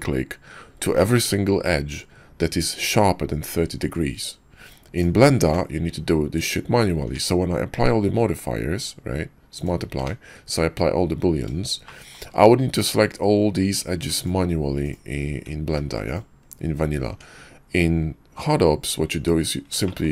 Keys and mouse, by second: 5.4 Tab, 6.3 click, 7.0 Tab, 7.7 q, 10.0 Tab, 11.8 shift+click, 12.8 click, 15.8 ctrl+z, 16.1 ctrl+click, 17.1 Tab, 19.8 shift+middle drag.